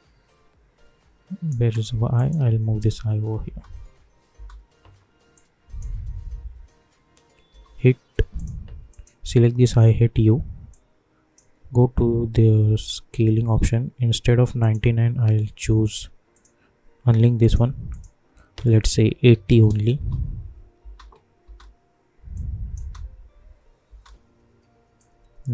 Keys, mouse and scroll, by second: 2.8 [, 3.4 space, 5.3 click, 5.4-7.5 drag, 7.5 u, 8.3 click, 9.7 u, 10.7-12.6 drag, 12.6 j, 13.2 k, 14.6 click, 19.9 Return, 20.9 space, 22.3 click, 22.8 space, 24.9 click.